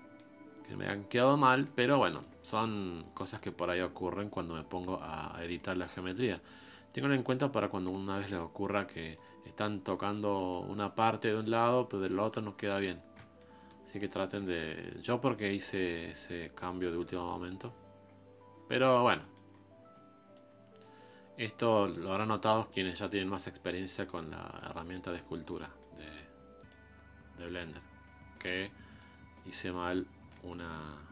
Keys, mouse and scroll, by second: 1.9 scroll down 1, 2.1 shift+middle click, 2.4 scroll up 2, 3.4-8.0 drag, 8.0 shift+middle click, 8.9-9.6 scroll down 9, 9.6-9.9 scroll up 5, 9.9 middle click, 10.7-11.4 scroll up 1, 11.4-12.9 ctrl+drag, 12.9-13.4 scroll down 2, 13.4-14.5 ctrl+drag, 14.5-15.6 middle drag, 15.6-16.2 scroll up 1, 16.2-18.9 ctrl+drag, 18.9 scroll down 4, 19.2 middle click, 19.5-20.3 scroll up 4, 20.3-22.1 ctrl+drag, 22.1 scroll down 1, 22.4-23.6 middle drag, 23.6 scroll down 2, 23.9 middle click, 24.3 scroll up 1, 24.6-25.6 middle drag, 25.6 scroll up 1, 25.8 middle click, 26.7-30.5 ctrl+drag, 30.5 middle click, 30.9-31.1 scroll up 1.